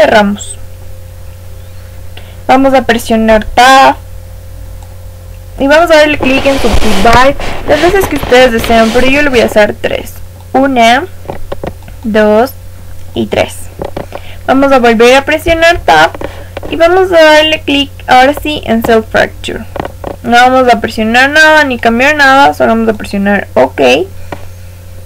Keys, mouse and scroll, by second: 3.3 Tab, 4.7 click, 10.3-15.0 drag, 15.4 Tab, 18.2 click.